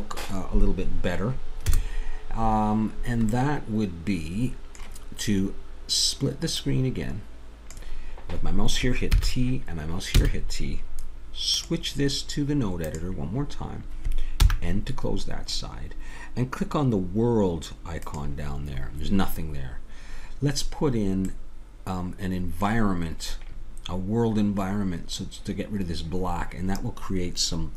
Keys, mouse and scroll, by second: 1.7 KP_0, 2.9-4.0 middle drag, 6.6-9.1 drag, 9.1 t, 10.2 t, 11.5-13.6 drag, 14.4 n, 18.0-20.7 drag, 20.7-26.0 middle drag.